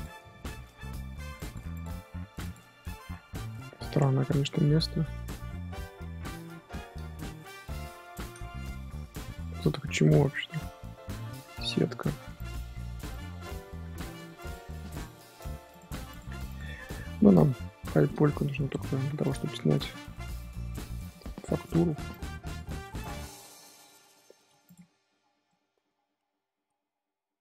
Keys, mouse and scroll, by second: 0.7 middle click, 1.3 click, 1.7 click, 2.1 g, 2.8 scroll up 1, 2.9 middle click, 3.5 scroll down 2, 3.6-4.1 scroll up 2, 4.1-8.0 shift+middle drag, 8.0 scroll up 4, 8.0-12.3 middle drag, 10.8 scroll up 1, 12.3 click, 13.4 click, 14.3 click, 15.0 middle click, 15.7 click, 16.1 click, 16.4 g, 16.6 middle click, 17.3 click, 17.6 g, 18.2 shift+middle click, 19.2 click, 20.3 click, 21.5 click, 22.4 click, 23.2 middle click, 23.6 a, 24.4 m, 25.1 scroll down 4, 25.4-27.4 middle drag.